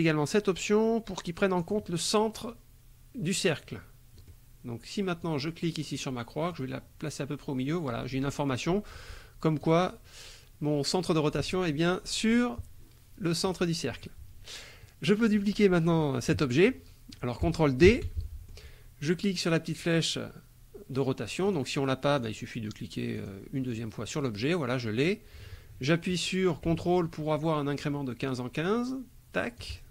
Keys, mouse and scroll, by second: 1.6 click, 4.2 click, 5.2 click, 6.5-9.8 drag, 17.8 ctrl+d, 18.2 ctrl+click, 21.4 click, 22.2 click, 23.2 click, 23.7 click, 25.0-29.8 drag.